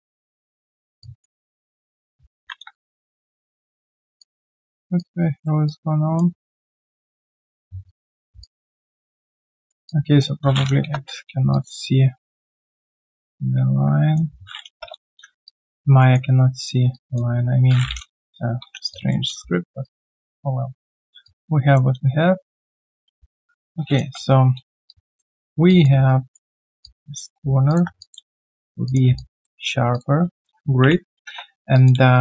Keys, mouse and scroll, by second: 1.0 alt+click, 2.3 ctrl+z, 2.9 shift+click, 5.6 alt+click, 7.1 shift+click, 8.4 alt+click, 9.8 alt+click, 11.4 Return, 11.5 alt+click, 14.7 Return, 15.4 alt+click, 16.0 alt+middle click, 16.3 alt+right click, 18.9 alt+click, 21.2 alt+click, 24.1 Return, 24.9 alt+click, 25.3 alt+middle click, 25.7 alt+click, 25.9 q, 26.0 right click, 26.8 alt+click, 28.0 alt+click, 29.1 alt+click, 30.8 ctrl+Delete, 31.7 alt+click, 31.9 q, 32.1 right click.